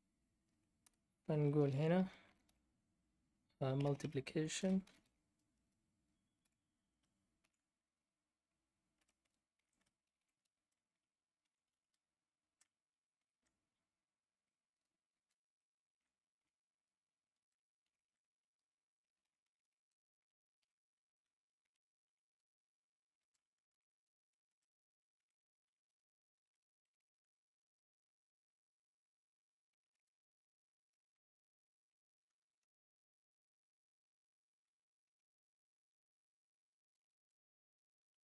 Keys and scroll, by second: 0.8 Return, 2.0-6.4 typing, 7.4 shift+s, 9.0-13.1 typing, 14.8-16.4 typing, 17.4-26.8 typing, 29.8 BackSpace, 29.9 BackSpace, 31.1-31.8 Left, 32.2 Right, 32.4 Right, 34.7-37.5 typing.